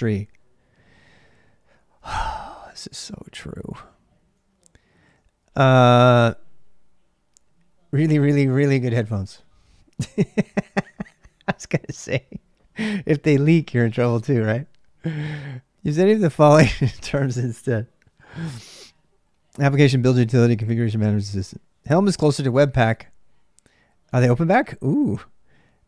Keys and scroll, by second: 0.0-25.8 typing.